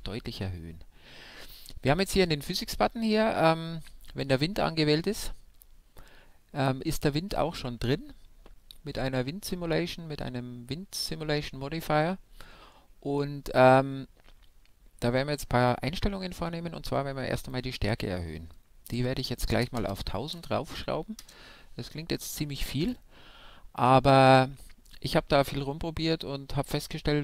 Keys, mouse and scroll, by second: 2.4-4.4 middle drag, 17.3-19.1 drag, 19.7 KP_0.